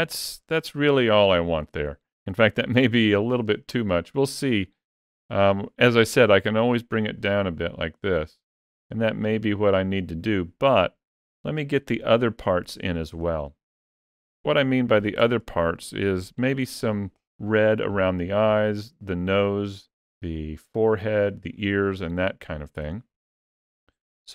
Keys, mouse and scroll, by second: 0.2 click, 2.4 ctrl+middle click, 2.9 ctrl+middle click, 3.4 middle click, 4.7 ctrl+middle click, 6.6 click, 13.1 ctrl+middle click, 13.9 shift+middle click, 14.4 middle click, 15.4 shift+middle click.